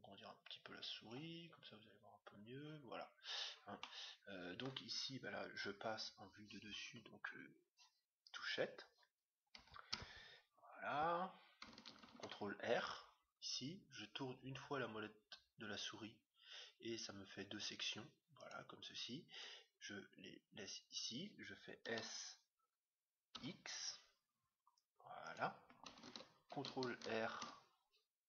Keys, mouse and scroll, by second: 3.8-5.5 middle drag, 6.9 KP_7, 10.0 Tab, 10.7-12.9 middle drag, 12.0 ctrl+r, 21.8 s, 27.3 ctrl+r.